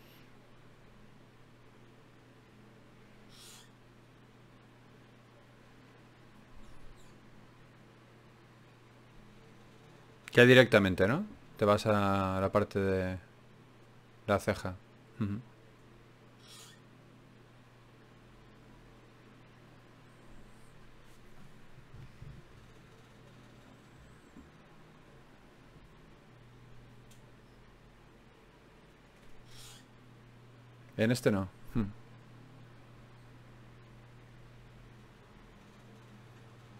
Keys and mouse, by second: 0.2 e, 1.2 right click, 2.0 f, 4.0 right click, 4.4-7.8 middle drag, 6.8 d, 7.8-10.0 drag, 14.7 click, 16.7 shift+q, 22.1-28.7 right drag, 22.9-28.7 drag.